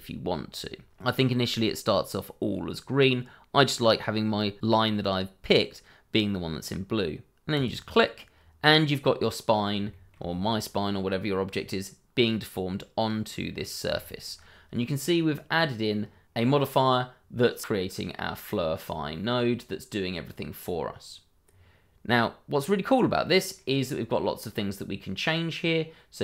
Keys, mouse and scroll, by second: 7.5 click, 8.6-8.9 scroll up 1, 8.9 middle click, 9.9 shift+middle click, 10.8 middle click, 13.5-13.8 scroll down 1, 13.9 shift+middle click, 14.3-15.0 shift+scroll up 2, 15.0-15.4 scroll down 1, 15.4-16.7 scroll up 1, 17.3-20.4 scroll down 1, 21.5-22.5 scroll down 1, 22.5-23.2 scroll up 1, 23.2 middle click, 24.8-25.6 scroll down 1, 25.9 scroll up 1.